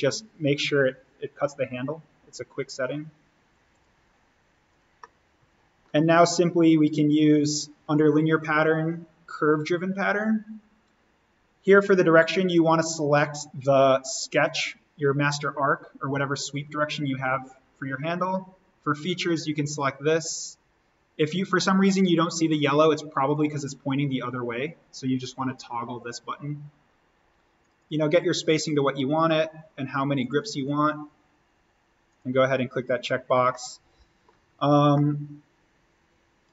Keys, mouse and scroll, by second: 4.2 click, 5.0-8.7 middle drag, 8.7 click, 12.6 click, 15.1-16.4 scroll up 1, 16.4 click, 19.4 click, 21.5-21.8 scroll down 1, 23.3 click, 26.7-27.6 scroll up 1, 27.6 click, 28.8-29.5 scroll up 1, 30.2 click, 33.4 middle click, 34.5-34.9 scroll down 1, 34.9 middle click, 35.8-36.5 scroll down 1.